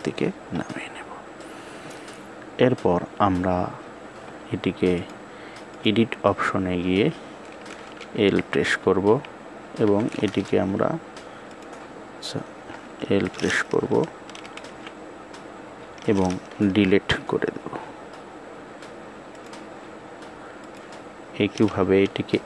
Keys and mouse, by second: 4.8 click, 7.9 l, 11.3 click, 14.5 l, 16.6 Delete.